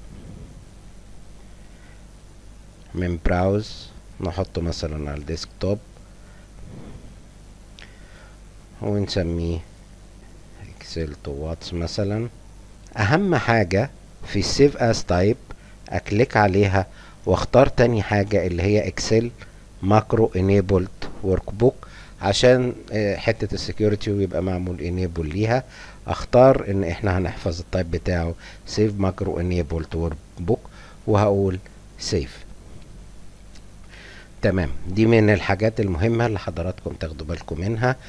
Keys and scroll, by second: 6.6-12.8 typing.